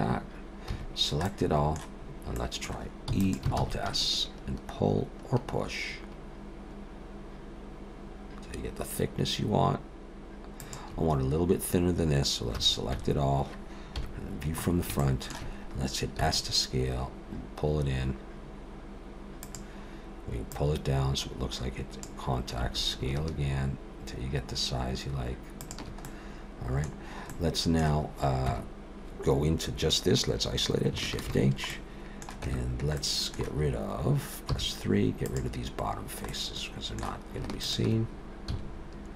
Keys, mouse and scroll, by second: 0.7 a, 0.8-1.2 scroll down 2, 1.2 middle click, 2.0-2.4 scroll up 1, 2.4 middle click, 3.1 e, 3.6 alt+s, 12.6 a, 13.0 a, 14.0 KP_1, 14.6-15.0 scroll up 4, 15.0 shift+middle click, 16.2 s, 20.5 click, 22.6 s, 26.1 middle click, 27.0-28.1 scroll down 3, 27.3 middle click, 28.5 Tab, 31.2 shift+h, 31.7 middle click, 32.4 Tab, 33.0 middle click, 34.5 3, 35.2 click, 36.3 middle click, 37.6 shift+click, 38.5 x.